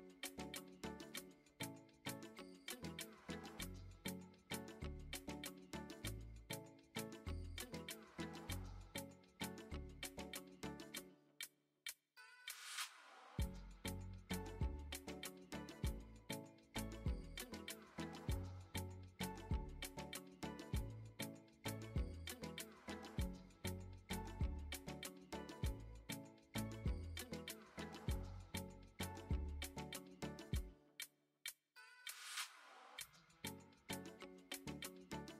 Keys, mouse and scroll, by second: 0.6 click, 2.8-3.8 drag, 5.1 middle click, 7.3 click, 10.1 click, 11.2 h, 11.7 middle click, 13.0 n, 14.3-16.0 drag, 19.2 click, 21.0-21.3 shift+middle drag, 21.5-22.1 middle drag, 22.5-24.1 middle drag, 27.2 click, 28.1-32.1 drag, 32.8 shift+middle drag, 33.3-33.8 middle drag, 34.3 KP_3, 35.1 KP_1.